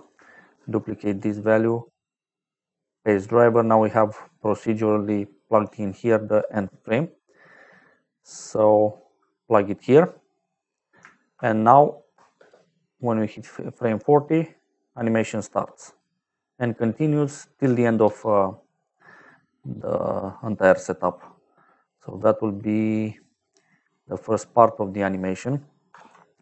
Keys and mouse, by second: 0.4 shift+d, 1.0 click, 1.7 right click, 2.7 click, 4.4 click, 5.6 click, 8.7 click, 11.3 shift+click, 12.3 space, 18.0 space, 18.7 middle click, 20.7 click, 22.1 middle click, 24.0 click, 25.8 ctrl+j.